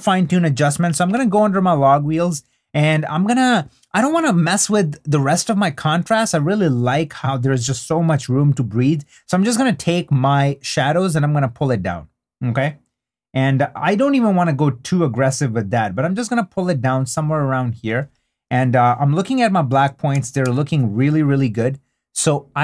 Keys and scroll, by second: 20.1 super+d.